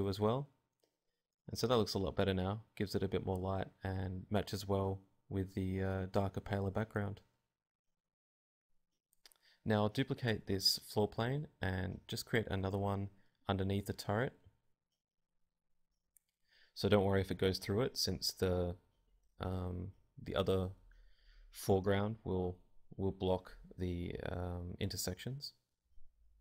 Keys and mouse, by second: 1.4-4.5 drag, 4.5-5.8 middle drag, 5.8 a, 6.0-7.2 drag, 7.7 click, 8.1-10.4 typing, 10.1 click, 10.4 click, 15.4-16.6 drag, 16.1 z, 17.4 alt+z, 21.0 n, 22.8-25.4 typing, 23.1 click, 23.5-25.1 right drag, 25.1 click, 25.2 right click, 25.4 click.